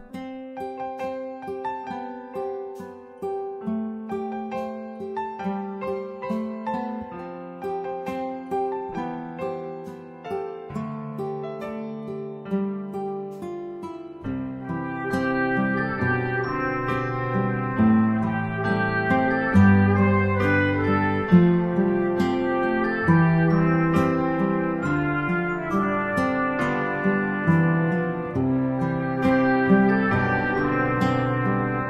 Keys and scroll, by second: 12.3 ctrl+alt+shift+e.